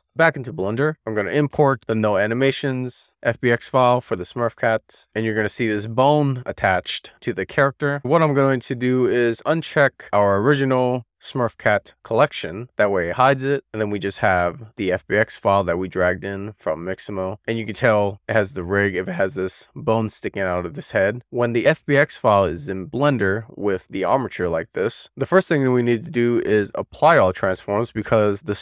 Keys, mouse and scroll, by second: 0.8 middle click, 1.1-3.2 drag, 6.0-6.6 scroll down 1, 6.6-7.4 middle drag, 7.6-8.3 scroll up 2, 10.5 click, 13.6-14.0 scroll down 2, 14.0-14.5 scroll up 1, 14.6 shift+middle click, 15.5-16.1 shift+middle drag, 16.6-18.2 shift+middle drag, 18.9 shift+middle click, 20.0 middle click, 21.0-21.5 scroll up 1, 21.5-21.9 scroll down 1, 21.9 middle click, 22.4-23.5 shift+middle drag, 23.3 shift+scroll down 1, 24.8 shift+middle click, 25.5 middle click.